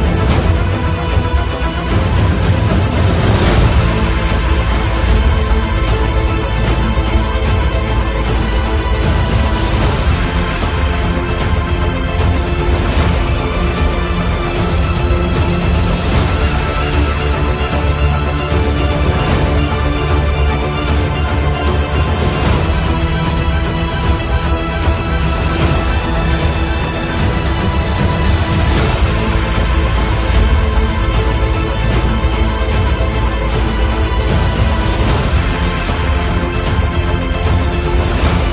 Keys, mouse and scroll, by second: 1.1 click, 4.5 click, 7.4 typing, 10.8 ctrl+z, 12.0 click, 17.2 typing, 17.4-21.4 drag, 21.5 Delete, 22.7 click, 25.0-29.5 alt+shift+drag, 29.3-29.7 typing, 32.7 typing, 33.5-36.8 alt+drag, 35.2 typing, 36.8-38.5 alt+shift+drag, 37.2 typing.